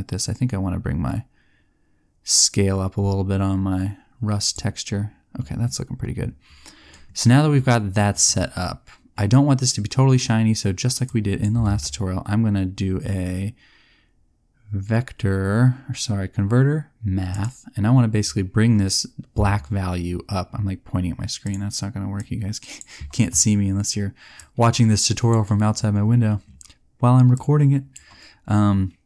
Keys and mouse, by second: 9.9 middle click, 11.0 click, 11.6 shift+a, 22.9 click.